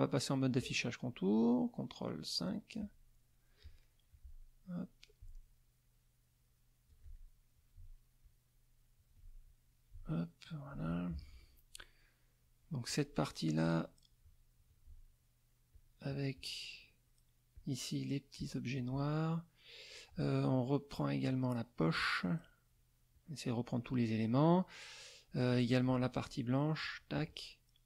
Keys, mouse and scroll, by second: 2.7 click, 3.8 middle click, 5.2-7.1 alt+drag, 8.2-9.2 alt+drag, 9.4-10.8 alt+drag, 10.9 alt+middle click, 12.8 click, 13.6 click, 15.7 shift+click, 16.3 shift+click, 17.5 shift+click, 18.3 shift+click, 19.5 middle click, 20.9 shift+click, 22.2 shift+click, 23.1 shift+click, 25.5 shift+middle click, 26.8 shift+click.